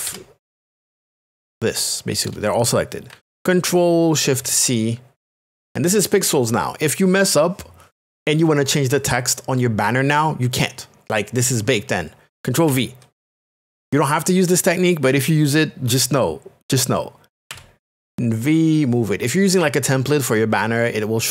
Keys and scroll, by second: 0.1 ctrl+KP_Add, 0.6 space, 5.2 shift+c, 12.7 ctrl+v, 17.5 v.